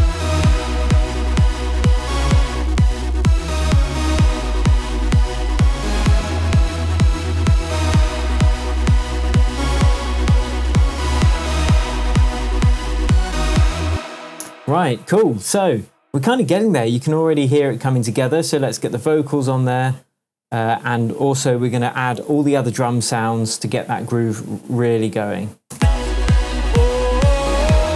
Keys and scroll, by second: 12.4 Tab, 14.3 super+s, 25.7 space.